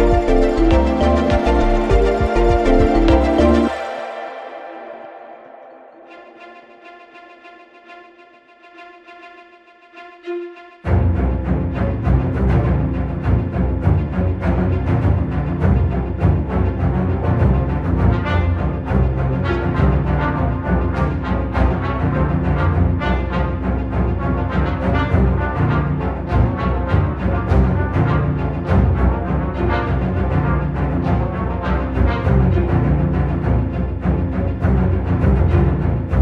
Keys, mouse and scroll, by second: 2.2-4.2 drag, 4.9-9.5 drag, 11.5-14.5 drag, 20.7 click, 26.0-36.2 drag.